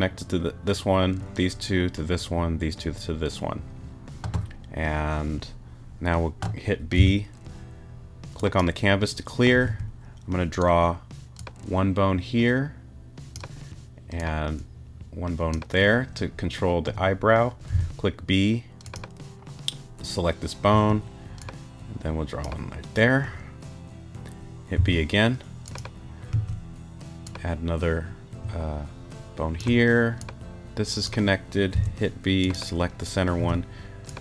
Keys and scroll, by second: 7.0 b, 9.6 a, 17.7 b, 20.7 a, 24.8 b, 26.3 a, 31.7 b, 33.4 a.